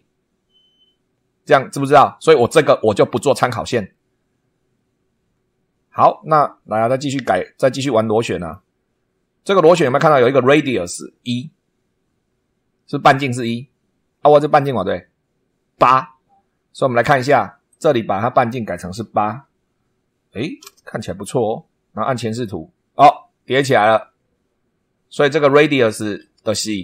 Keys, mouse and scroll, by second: 8.4 click, 17.7 click, 19.3 8, 20.6 Return, 22.3 click.